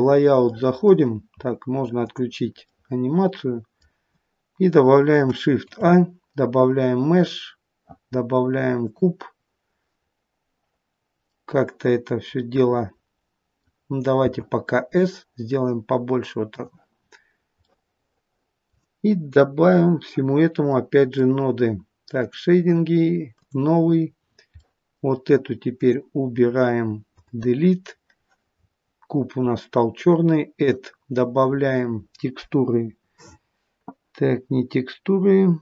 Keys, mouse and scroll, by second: 0.7 middle click, 2.2 click, 2.8 middle click, 5.5 shift+a, 11.4 middle click, 11.9 middle click, 12.5 middle click, 14.3 s, 17.0 scroll down 5, 17.6 middle click.